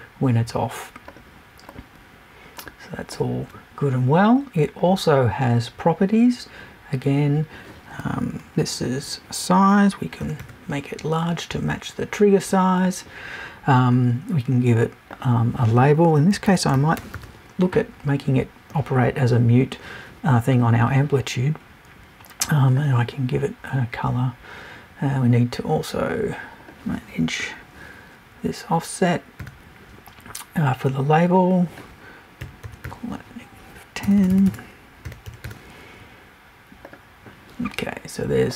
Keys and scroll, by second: 34.0 BackSpace.